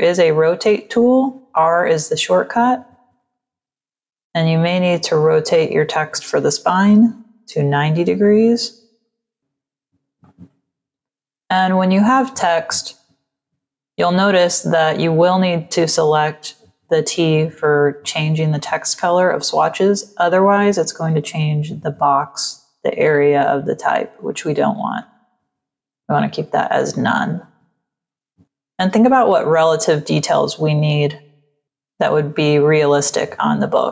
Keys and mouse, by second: 3.1 click, 5.4 click, 6.9 KP_9, 8.9 click, 10.1 click, 18.5 click, 20.2 click, 21.1 click, 24.9 click, 27.1 click, 28.0 click, 31.6 click.